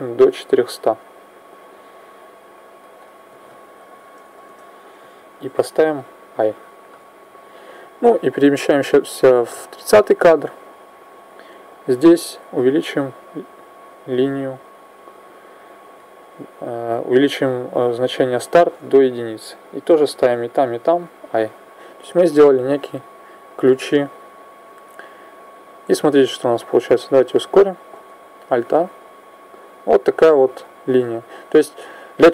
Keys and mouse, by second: 2.8 click, 8.2 click, 11.9 click, 20.1 i, 20.5 i, 22.0 click, 27.9 alt+a, 30.1 click.